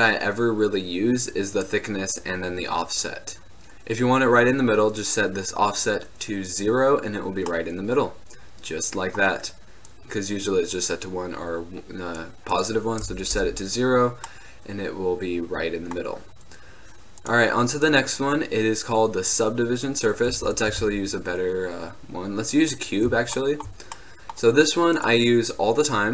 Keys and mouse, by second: 0.4 click, 1.0 middle click, 1.5 middle click, 2.4-3.5 drag, 7.6-9.4 middle drag, 14.4-14.8 middle drag, 14.9 middle click, 15.1 middle click, 15.3 middle click, 15.6-19.6 drag, 20.4 x, 20.9 shift+a, 23.1-23.5 drag, 25.1-26.1 drag.